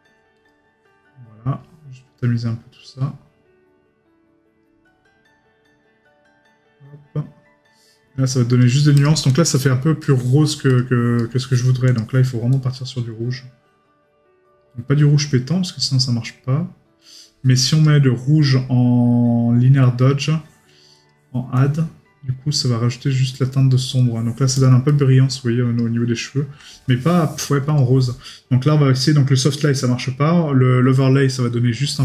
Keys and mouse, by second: 11.2 right click.